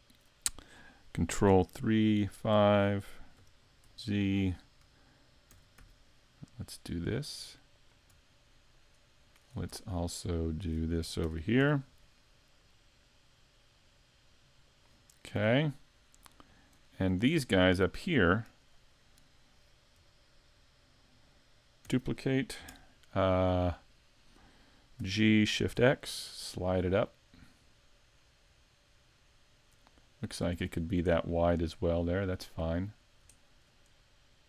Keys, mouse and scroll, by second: 1.5 ctrl+KP_3, 2.3 KP_5, 3.4 KP_5, 3.8 z, 5.5 shift+d, 7.9 click, 8.7 shift+right click, 9.2 shift+right click, 9.9 shift+middle click, 11.2 shift+d, 15.1-15.4 scroll down 2, 15.4 a, 15.8-16.4 scroll down 3, 16.4 shift+middle click, 16.9 scroll up 3, 17.3 shift+middle click, 18.5 right click, 21.9 shift+d, 25.0 g, 30.5 click, 30.8-31.2 scroll up 3, 31.2 shift+middle click, 33.0-33.4 scroll up 1, 33.4 shift+middle click.